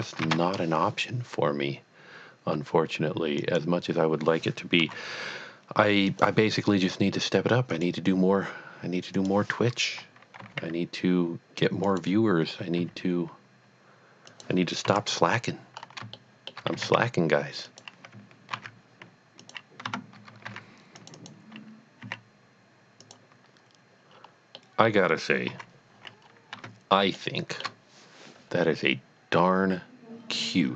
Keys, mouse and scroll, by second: 0.4 a, 3.4 a, 3.4 click, 4.8 KP_3, 6.1 click, 7.7 click, 9.1 click, 10.4 g, 12.0 click, 12.8 s, 14.4 click, 14.9 KP_1, 15.8 scroll up 1, 16.2 shift+middle click, 16.8 s, 17.1 x, 17.7 click, 18.5 ctrl+a, 19.4 click, 19.8 Tab, 21.0 click, 21.3 double click, 22.0 s, 23.1 click, 24.1 scroll up 1, 24.7 middle click, 25.5 KP_3, 26.1-26.6 scroll down 2, 26.6 Tab, 27.2 shift+middle click.